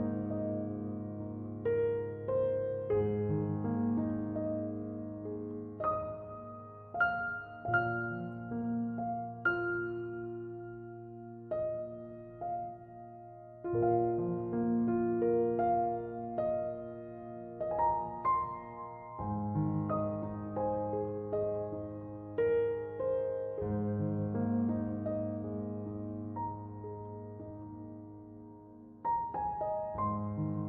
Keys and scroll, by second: 24.2-25.6 typing, 28.7-29.8 typing.